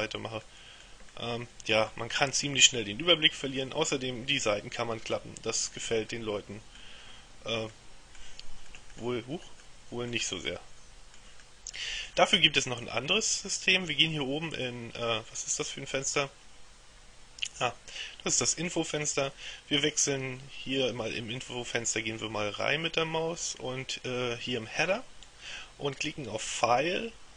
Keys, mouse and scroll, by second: 0.5 middle click, 1.2 middle click, 2.3 middle click, 3.7-6.3 middle drag, 7.8 middle click, 8.8 middle click, 9.7-10.7 middle drag, 11.5 middle click, 14.6 click, 26.6 click.